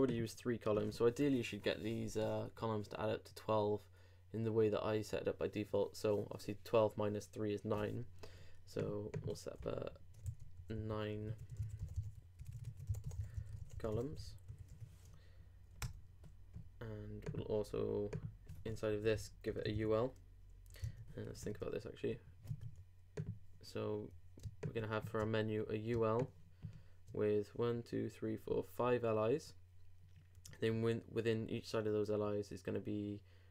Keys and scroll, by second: 10.2 super+Delete, 10.6 super+Return, 20.8 super+Tab.